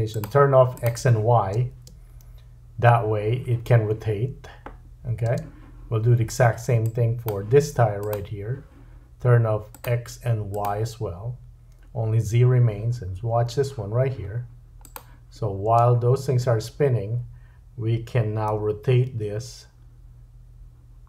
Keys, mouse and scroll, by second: 0.1 click, 0.2-0.8 middle drag, 0.8 click, 1.6 space, 5.3 space, 6.9-8.1 drag, 9.7 click, 10.5 click, 14.8 click, 15.7 space, 18.5 r.